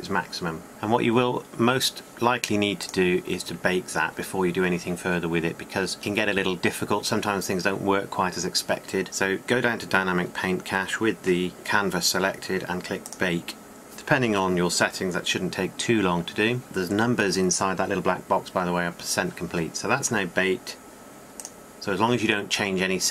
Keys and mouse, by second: 1.2-3.7 drag, 3.7 middle click, 3.8-11.0 drag, 14.6-16.6 drag.